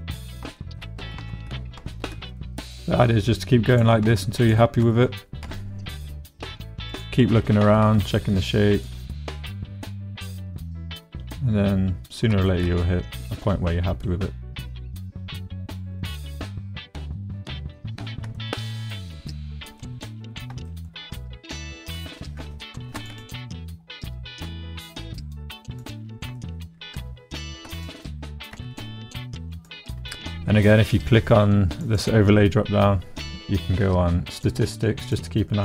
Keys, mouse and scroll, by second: 0.0 Tab, 0.3 shift+click, 0.5 shift+right click, 0.6 shift+click, 0.8 shift+right click, 1.2 Tab, 1.7 shift+right click, 1.9 shift+click, 2.3 click, 2.5 click, 4.0 shift+middle click, 5.4 s, 6.9 click, 7.5 g, 7.8 z, 8.7 click, 9.0-11.0 drag, 11.0-12.2 middle drag, 12.5 shift+click, 14.0-16.0 drag, 16.3-17.7 drag, 18.3 shift+middle click, 18.6 middle click, 19.8 shift+middle click, 20.6 shift+middle click, 22.7 ctrl+r, 23.3 click, 23.7 middle click, 24.4 s, 25.7 middle click, 26.3 shift+middle click, 27.4 ctrl+r, 27.9 click, 28.5 s, 29.5 click, 31.9-34.8 middle drag, 35.1 middle click.